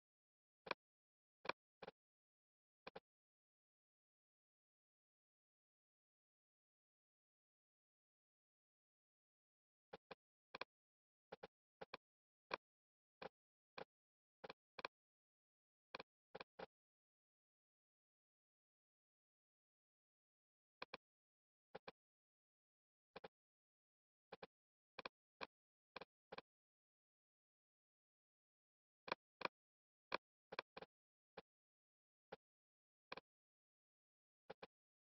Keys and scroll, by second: 22.4 super+z.